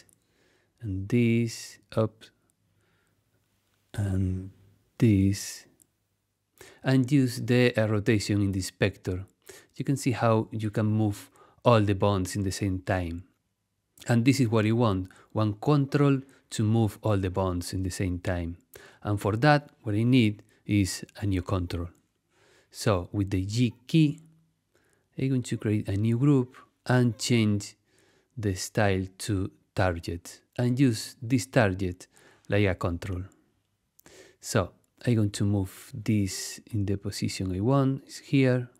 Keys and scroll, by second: 2.7 super+z, 16.4 super+z, 24.4 g, 34.0 t.